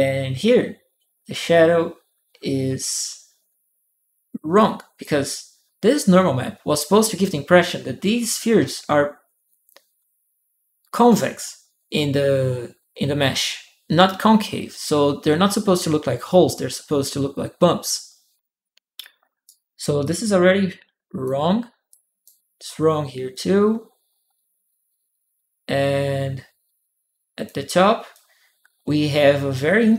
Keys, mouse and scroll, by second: 4.3 click, 19.2 right click, 19.8-21.0 drag, 21.7 click, 22.4-27.2 drag, 27.9-29.9 drag.